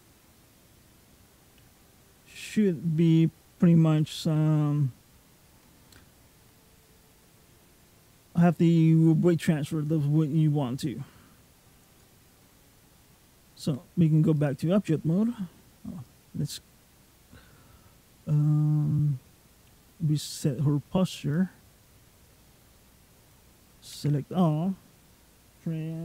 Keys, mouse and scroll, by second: 3.7 scroll down 1, 3.8 middle click, 5.5-6.6 scroll down 1, 6.6 scroll down 2, 6.7 middle click, 13.3 click, 15.9 click, 19.2 click, 21.1 click, 22.0 click, 23.8 a.